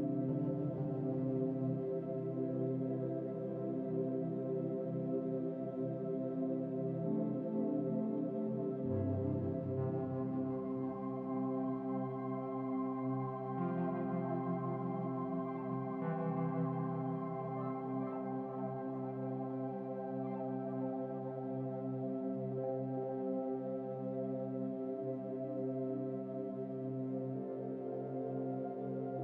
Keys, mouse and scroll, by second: 2.5-2.9 scroll down 3, 7.0-8.0 shift+middle drag, 8.0-9.0 scroll down 2, 9.0-9.5 scroll down 1, 12.5 Tab, 13.0-14.0 middle drag, 14.0 scroll up 2, 15.5-16.8 shift+middle drag, 16.8 click, 18.7 Tab, 19.9 Tab, 21.0 s, 22.4 u, 23.3 a, 24.0 a, 25.5 u, 27.5-28.8 drag.